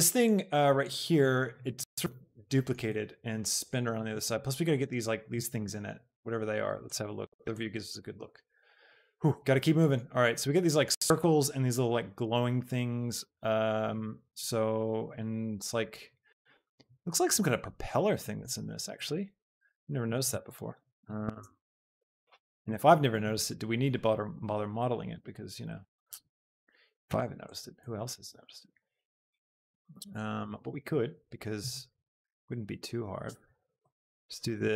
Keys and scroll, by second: 19.5 shift+Tab.